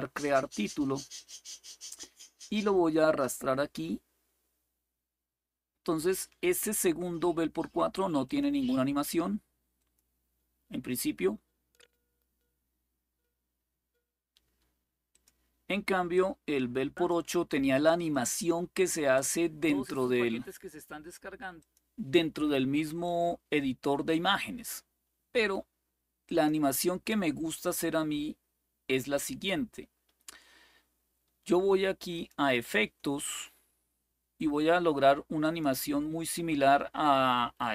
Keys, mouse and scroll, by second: 0.0 click, 3.1-6.0 drag, 8.0 click, 9.5 click, 14.9 click, 15.9-16.9 drag, 17.9 click, 21.3 click, 26.0 click, 27.4 click, 31.9 click, 35.2 click.